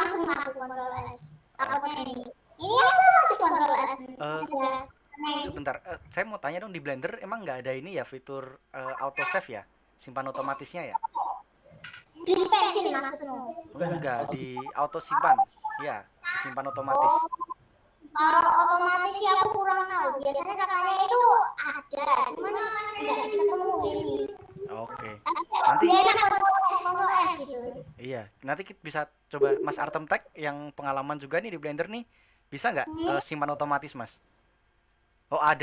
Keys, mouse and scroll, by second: 16.6-17.0 scroll up 1, 17.9 scroll up 1, 18.1-18.4 scroll down 1, 18.4-22.7 middle drag, 22.7-24.1 scroll down 1, 24.1 scroll up 1, 24.7-35.6 shift+middle drag.